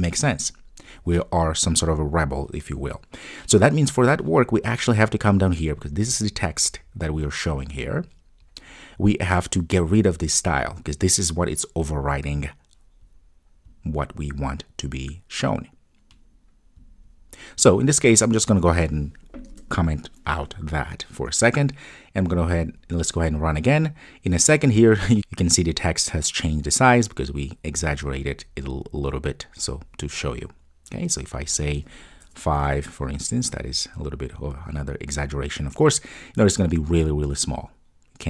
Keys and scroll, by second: 20.4 super+s, 22.6 ctrl+r, 32.7 super+s, 34.3 ctrl+r.